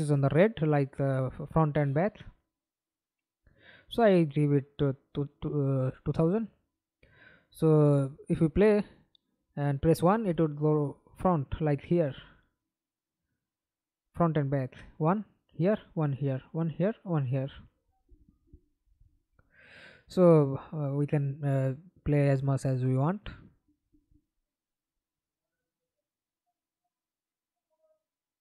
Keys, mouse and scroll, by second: 1.4 ctrl+c, 1.9 ctrl+c, 3.0-4.5 typing, 7.1 middle click, 8.0 F11, 8.3 alt+p, 9.8 s, 10.0 a, 10.8 1, 14.6 1, 15.6 1, 16.7-19.9 typing, 20.4 Escape, 20.6 middle click, 21.4 F11, 26.3 ctrl+v, 26.8 Return.